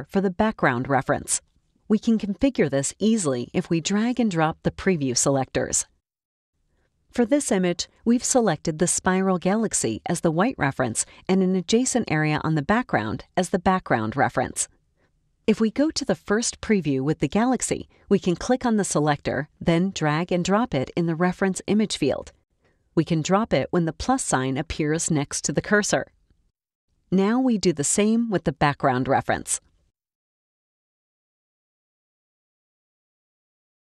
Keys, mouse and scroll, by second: 3.5 click, 8.3-9.0 scroll down 1, 9.0 scroll up 2, 9.2 space, 9.2 click, 9.7-10.2 scroll down 1, 10.2 click, 10.2 space, 18.4 click, 20.6-26.0 drag, 29.3 click, 29.9-32.5 drag.